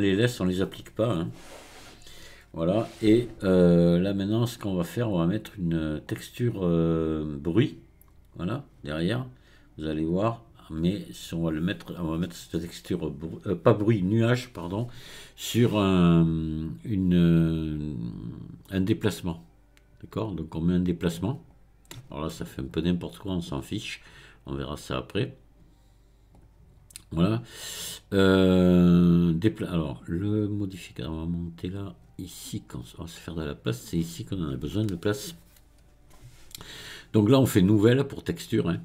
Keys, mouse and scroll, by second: 2.9-5.5 scroll down 2, 5.5-8.5 drag, 8.5-10.1 scroll down 1, 10.1-13.2 drag, 22.7-23.2 scroll down 4, 26.3-29.4 drag, 31.8-34.9 drag, 38.2-38.8 drag.